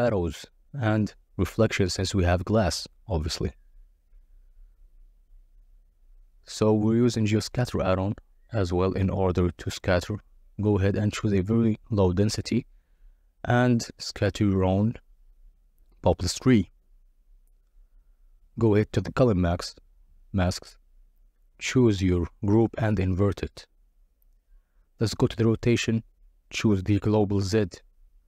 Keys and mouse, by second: 0.7 click, 3.2 click, 4.6 click, 5.8-7.5 drag, 9.2-10.8 drag, 16.2 click, 16.7 drag, 17.3 click, 18.4 click, 19.5 KP_0, 22.5 click, 24.2-25.4 drag, 26.0-27.9 drag.